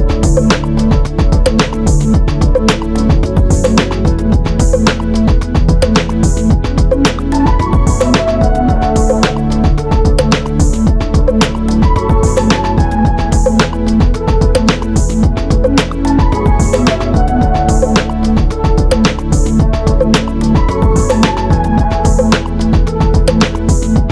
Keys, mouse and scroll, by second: 1.6 Escape.